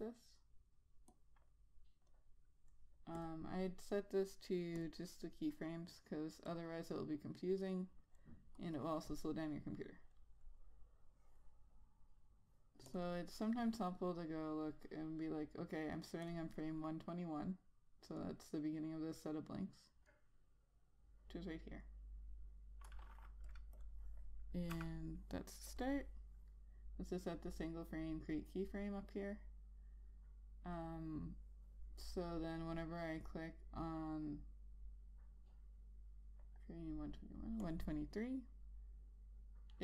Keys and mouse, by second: 16.8 click, 24.1 click, 24.4 double click, 26.3 click, 38.2 click.